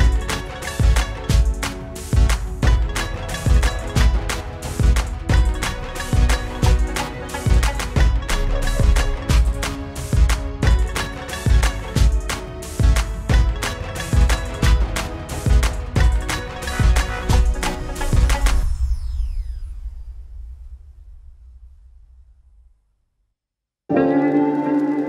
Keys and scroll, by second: 17.7 ctrl+=, 19.5 Down, 23.0 Down, 23.0 Up.